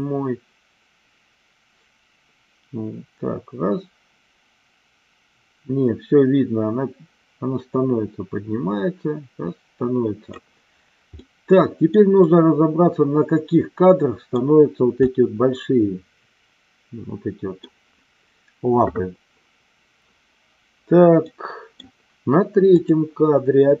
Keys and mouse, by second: 11.1-12.0 middle drag, 12.3-14.4 middle drag, 15.1-17.6 middle drag, 21.1-21.7 middle drag, 22.7 click.